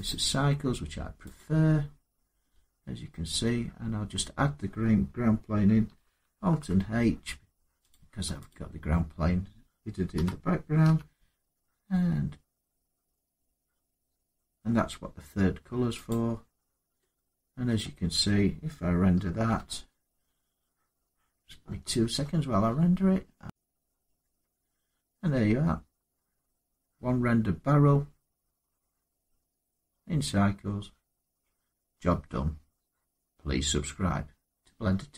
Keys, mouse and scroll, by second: 1.1 click, 2.9 middle click, 6.2 alt+h, 7.7 click, 8.2 click, 9.9-10.6 typing, 14.2-14.9 typing, 15.8 click, 16.3 scroll, 16.7 typing, 17.5 middle click, 19.2 F12, 23.4 click, 23.4 scroll, 23.6 scroll up 3, 27.7 scroll down 3.